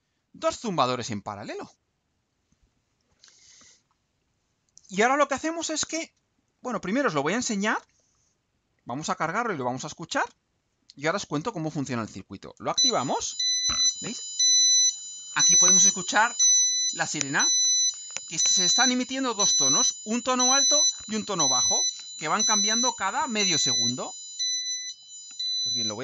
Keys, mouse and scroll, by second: 7.1 ctrl+u.